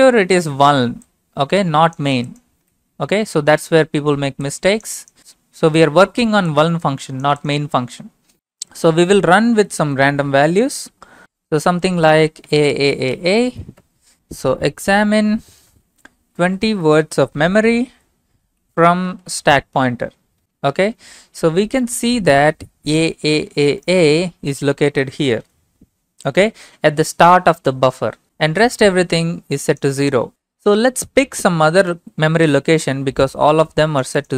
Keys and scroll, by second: 9.4-10.0 typing, 11.2 typing, 11.6 Left, 12.5-20.5 typing, 13.8 Return, 20.4 Return.